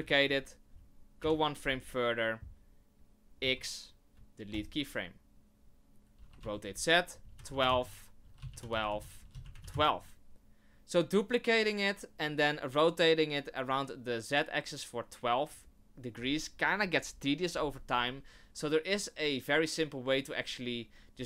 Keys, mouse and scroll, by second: 1.2 Right, 3.4 x, 6.2 r, 8.2 r, 9.2 r, 10.3 shift+middle click.